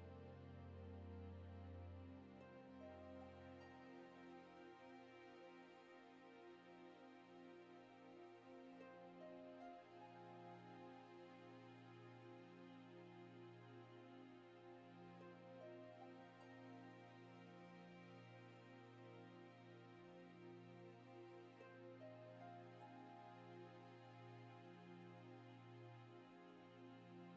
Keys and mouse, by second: 0.0 F6, 0.0 n, 0.7 shift+middle click, 1.7 shift+middle click, 3.1 KP_7, 4.6 click, 5.5-7.3 drag, 7.7 KP_1, 8.5 middle click, 9.1 click, 9.6 click, 10.5 click, 10.9 click, 11.6 click, 12.1 click, 12.6 click, 13.6 middle click, 14.0 KP_0, 14.7 click, 15.4 click, 15.9 click, 16.3 click, 16.7 middle click, 17.9 click, 18.2 middle click, 18.9 click, 19.0 shift+middle click, 19.5 click, 20.0 click, 20.4 click, 20.7 click, 20.7 right click, 20.9 middle click, 21.7 click, 21.8 middle click, 22.1 middle click, 22.7 click, 23.6 click, 23.9 middle click, 24.4 click, 24.8 KP_0, 25.4 shift+middle click.